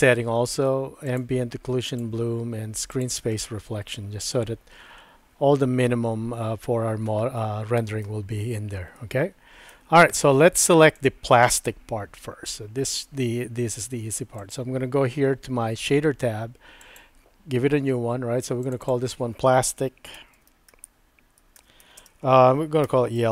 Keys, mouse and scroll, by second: 1.1 click, 1.9 click, 3.0 click, 7.4-8.1 shift+middle drag, 8.9 middle click, 11.0 click, 17.0 click, 18.6 click, 18.8-23.3 drag.